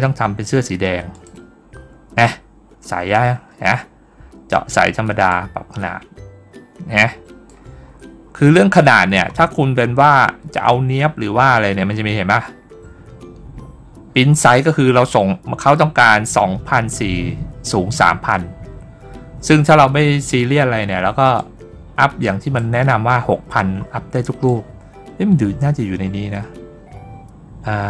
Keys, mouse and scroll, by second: 1.0 click, 2.1 scroll up 1, 3.2 scroll down 1, 5.1-7.3 drag, 7.7 scroll down 1, 8.1 middle click, 8.6-9.3 scroll up 2, 9.7-10.1 scroll down 1, 11.4 scroll up 1, 12.1 scroll down 1, 14.3 scroll up 1, 21.2-22.4 drag, 22.7-23.3 scroll up 1, 23.3 middle click, 24.3-27.8 drag.